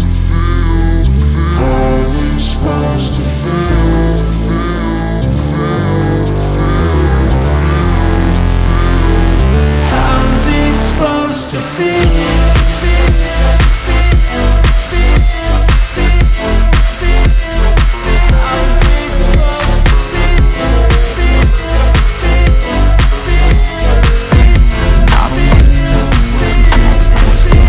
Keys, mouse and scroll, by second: 0.3 ctrl+t, 1.5 click, 5.9 click, 8.9 z, 9.1 click, 13.9 ctrl+shift+n, 14.5 Return, 15.3 x, 16.0 shift+F5, 16.2 Return, 17.5 ctrl+[, 21.1 ctrl+click, 21.6 ctrl+e, 22.6 click, 25.4 ctrl+t.